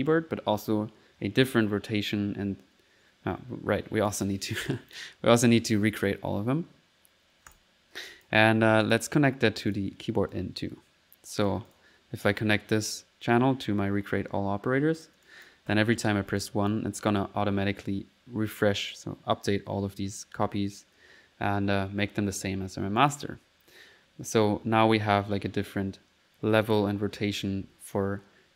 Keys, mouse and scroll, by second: 1.2 typing, 4.1 click, 4.8 typing, 4.9 click, 7.5 click, 8.1 click, 8.6 click, 9.7 click, 10.3-11.6 drag, 13.3 typing, 15.0 click, 15.8 1, 16.4 click, 20.3 middle click, 20.9 typing, 23.0 click.